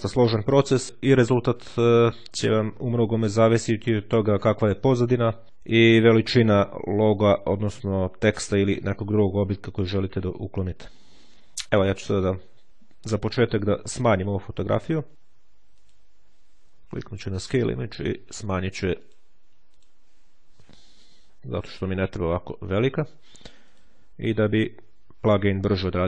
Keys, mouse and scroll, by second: 13.4 click, 15.6 click, 17.2 KP_8, 17.3 KP_0, 19.0 click, 19.8 click, 21.7-22.6 ctrl+scroll up 1, 23.6 click.